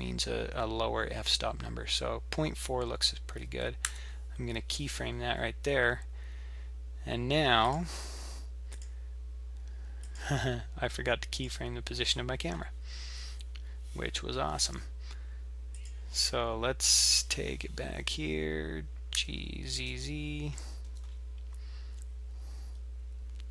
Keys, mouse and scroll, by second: 7.7 click, 8.8 click, 10.3 click, 11.3 click, 15.8 click, 16.9 click, 19.1 g.